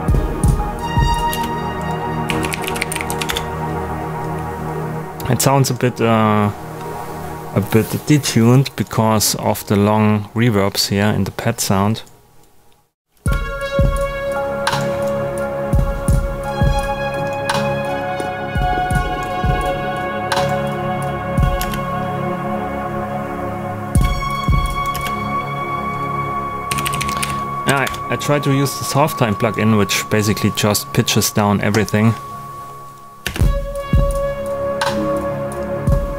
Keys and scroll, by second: 1.3-3.3 typing, 13.1 space, 21.5 space, 23.8 space, 26.4-27.7 typing, 27.8 Return, 33.2 space.